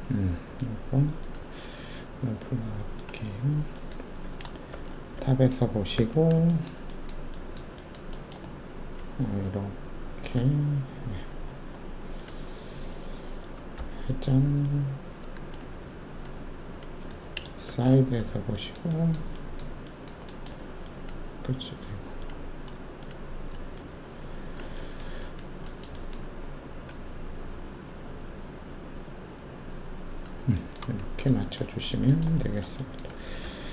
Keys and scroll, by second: 4.7 alt+shift+2, 5.9 alt+4, 13.7 e, 15.7 w, 17.6 shift+4, 30.9 alt+shift+q.